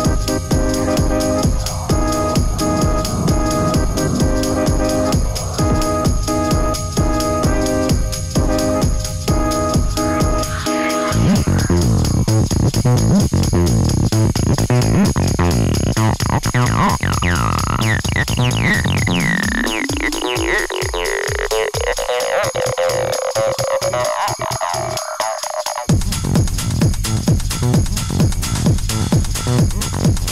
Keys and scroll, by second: 26.5 ctrl+z, 29.1 ctrl+d, 29.3 Escape.